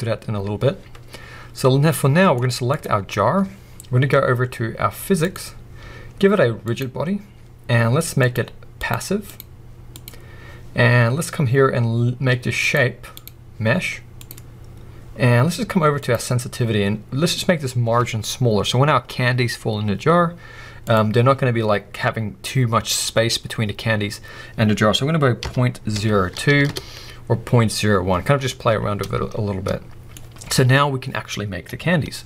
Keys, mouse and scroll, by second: 1.9-2.7 middle drag, 2.7 click, 5.2 click, 6.7-8.3 drag, 8.7 click, 9.2-12.7 drag, 13.1-14.2 drag, 16.0-29.0 drag, 26.7 Return, 28.6-29.0 scroll down 1, 29.0-32.2 middle drag.